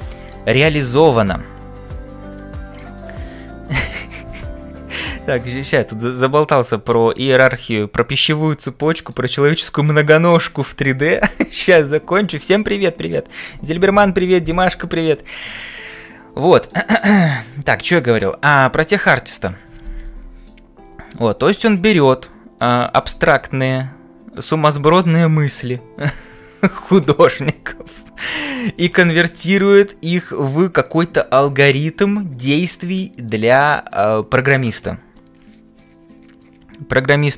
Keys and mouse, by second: 2.3 middle click, 7.1 shift+middle click, 7.5-9.2 middle drag, 15.9 middle click, 20.0 middle click, 22.6 click, 23.2 f.